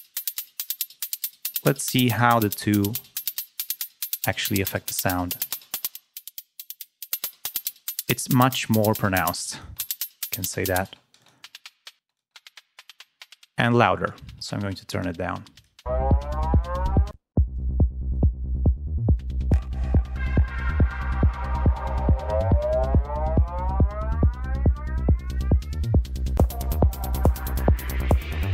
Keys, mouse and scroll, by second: 1.7 click, 2.5 click, 5.3 click, 5.7 click, 7.0 click, 7.5 click, 8.5 click, 9.4 space, 9.5 click, 10.8 space, 11.2 click, 12.0 space, 12.1 click, 13.2-15.2 drag, 15.5 click, 16.2 click, 17.1 space, 17.2 click, 21.2 ctrl+scroll up 2, 22.9 click, 23.4 click, 24.6 click, 25.1 click, 26.3 click, 27.8 click, 28.3 click.